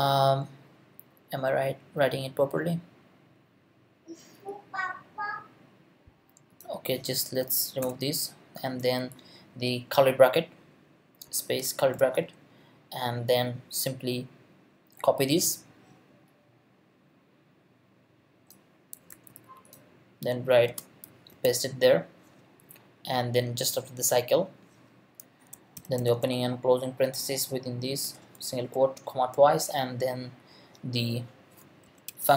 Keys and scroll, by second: 7.8 BackSpace, 11.6 shift+[, 19.1 super+c, 20.7 space, 21.3 super+v, 25.5-26.5 typing, 27.2 shift+Left, 28.0 ', 28.7 Left, 31.6-32.3 typing.